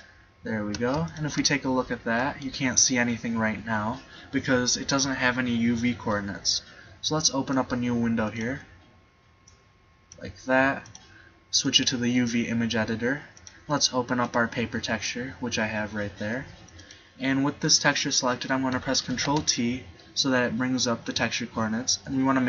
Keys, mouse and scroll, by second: 2.2 middle click, 7.7 click, 15.0 middle click, 16.8-18.6 right drag, 19.2 ctrl+t.